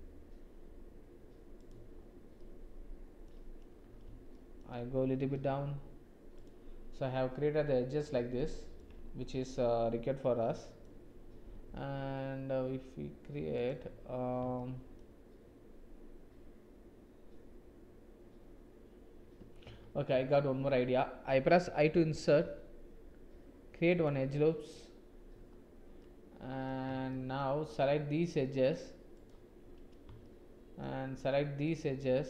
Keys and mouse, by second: 2.3 click, 2.6 middle click, 4.3 shift+click, 5.1 g, 8.4 shift+click, 10.2 click, 11.7 ctrl+r, 14.6 shift+click, 19.6 ctrl+z, 21.9 i, 26.0 click, 27.0 shift+click, 29.2 shift+click, 30.2 shift+middle click, 31.7-32.2 shift+drag.